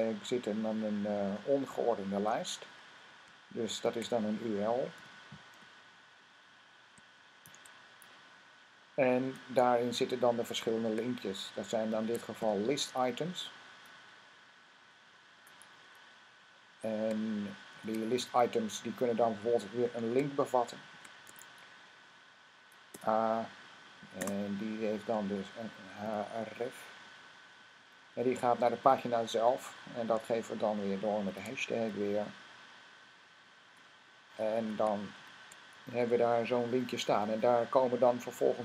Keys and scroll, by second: 2.0 Up, 3.7 typing, 4.8-5.4 typing, 7.2-7.9 typing, 11.5-12.3 typing, 17.5 shift+., 20.1-21.1 typing, 25.9 typing, 27.4 Down, 30.9-31.6 typing, 35.0 typing, 37.6 typing.